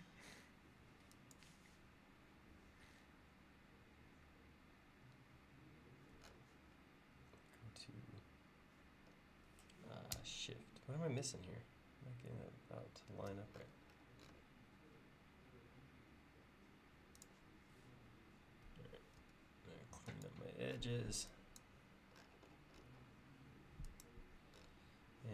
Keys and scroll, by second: 19.2 e.